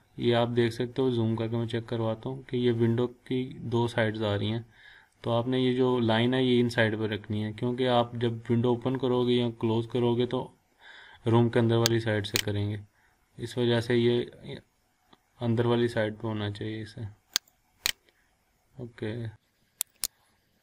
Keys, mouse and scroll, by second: 12.3 click, 12.7-13.4 scroll down 1, 15.9 scroll up 1, 17.3 click, 17.8-19.1 scroll down 1, 19.1-19.7 scroll up 1, 20.0 click, 20.1 scroll down 1, 20.4 scroll up 1.